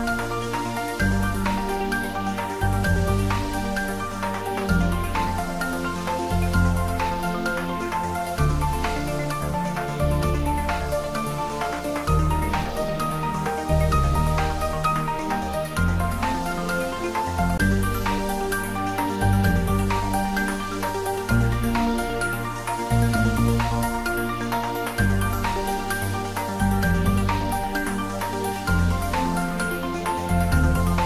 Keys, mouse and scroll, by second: 0.9 click, 1.7-2.0 scroll down 1, 3.7 e, 10.9 click, 12.0-13.7 scroll up 1, 13.7 Tab, 14.1 click, 29.8 click.